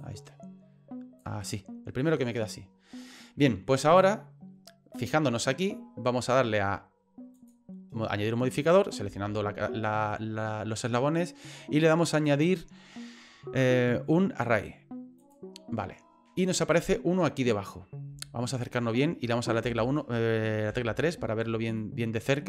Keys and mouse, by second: 0.0-1.2 drag, 1.4 right click, 3.9 right click, 7.3-15.3 drag, 19.6 KP_1, 20.7 KP_3, 21.9 shift+middle click.